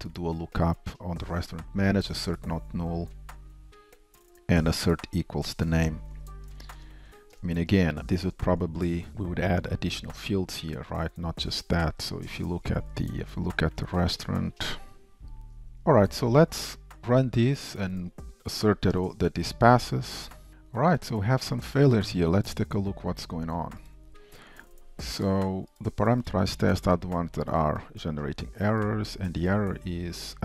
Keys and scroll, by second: 19.8 ctrl+shift+Down.